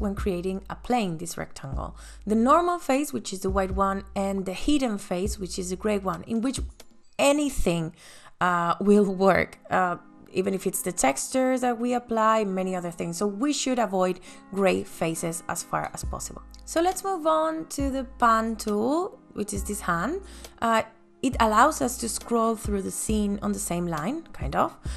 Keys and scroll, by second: 23.2 space.